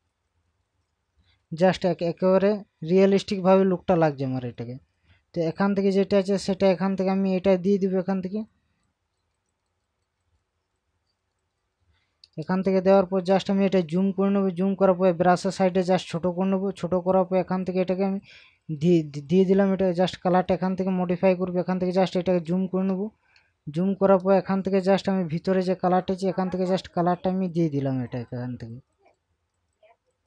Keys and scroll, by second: 10.0 ctrl+KP_Add, 12.4 ctrl+KP_Add, 22.0 ctrl+KP_Add, 24.2 ctrl+KP_Subtract.